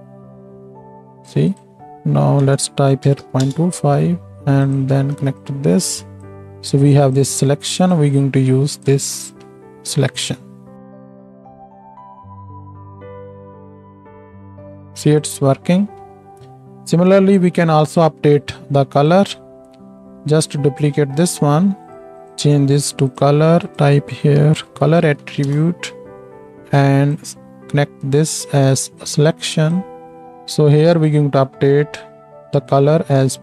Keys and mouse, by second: 5.5-7.2 drag, 7.9-11.1 drag, 11.4 shift+Left, 11.5 space, 14.2 space, 15.0 click, 15.1-19.0 middle drag, 19.4-30.2 shift+middle drag, 19.4-30.2 shift+right drag, 20.0 shift+d, 22.3-31.0 drag, 30.2 ctrl+z, 30.2 ctrl+s, 30.2 shift+Left, 31.1-33.4 drag.